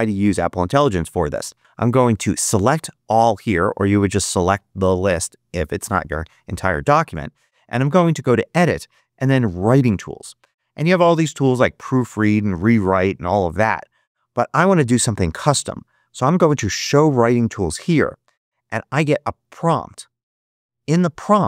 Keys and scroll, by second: 2.4 super+a.